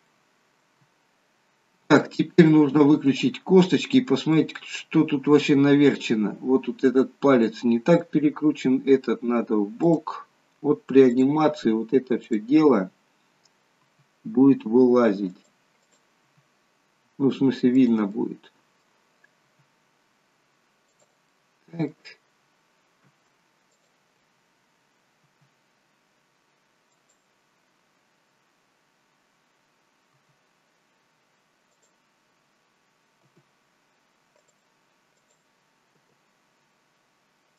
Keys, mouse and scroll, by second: 0.2 middle click, 1.9 click, 3.2 click, 3.9 scroll down 2, 4.5 middle click, 5.0 scroll up 3, 5.5 scroll down 1, 7.5 middle click, 10.0 click, 11.2 click, 12.3 click, 14.0 r, 15.9 click, 16.4 r, 18.2 middle click, 19.6 r, 21.4 middle click, 23.9 shift+click, 25.3 r, 30.3 r, 33.4 g, 35.2 click, 36.0 g.